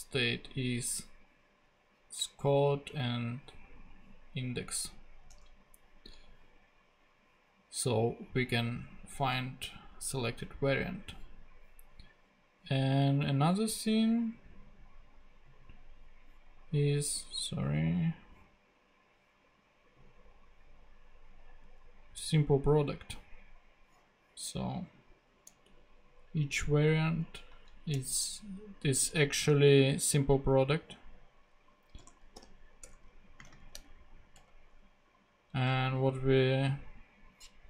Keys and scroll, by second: 5.3 super+Tab, 26.5 Up, 26.9 Right, 27.9 Return, 32.0 p, 32.3 r, 32.8 Return, 33.4 space, 33.7 shift+[, 34.3 shift+Return.